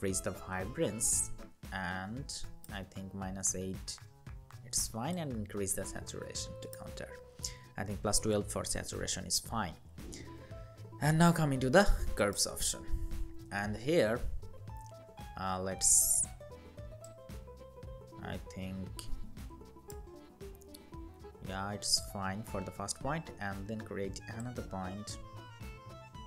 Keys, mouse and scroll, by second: 3.3 Down, 3.9 Down, 6.9 Down, 9.5-12.6 scroll down 1, 19.7 Up, 19.9 Up, 20.1 Up, 20.7 Up.